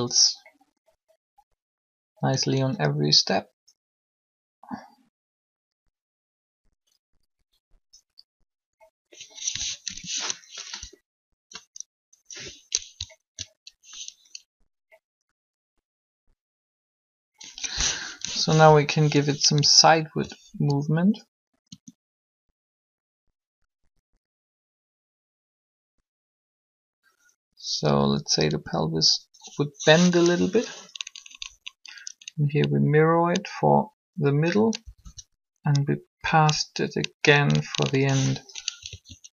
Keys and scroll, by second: 9.8 7, 10.6 Down, 18.2 7, 20.6 alt+shift+r, 21.7 shift+r, 28.1 r, 31.1 Up, 34.8 Up, 38.7 alt+a.